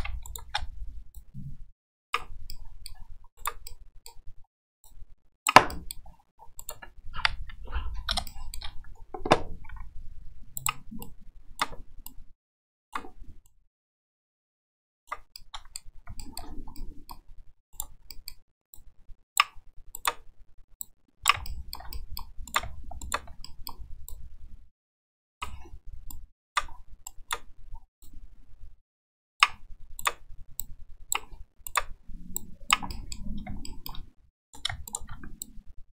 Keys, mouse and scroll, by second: 0.2 shift+right click, 1.1-2.1 drag, 2.5-2.9 middle drag, 3.3 right click, 3.6 middle click, 4.8 click, 5.7 middle click, 6.6 right click, 7.3 KP_1, 8.2 shift+middle click, 9.7 g, 11.0 right click, 12.0 right click, 13.4-15.1 right drag, 15.3 middle click, 16.2 shift+middle click, 16.7 middle click, 17.7 right click, 18.1 middle click, 18.7 click, 19.9 right click, 20.8 click, 21.4-21.7 shift+middle drag, 22.0 middle click, 22.4 right click, 23.0 shift+right click, 23.4 middle click, 24.0-25.4 drag, 26.1 right click, 27.0 right click, 28.0-29.4 drag, 29.9 right click, 30.6 click, 31.6 right click, 32.3 click, 32.9 middle click, 33.7 shift+middle click, 34.4 right click, 34.8 shift+right click, 35.4-35.9 drag.